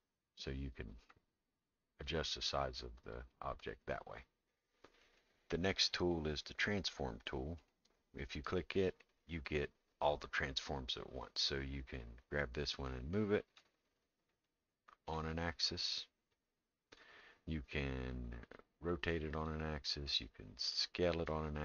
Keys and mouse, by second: 2.1-4.2 drag, 12.0-13.6 drag, 14.4 click, 16.3 click, 18.9 click, 20.8 click.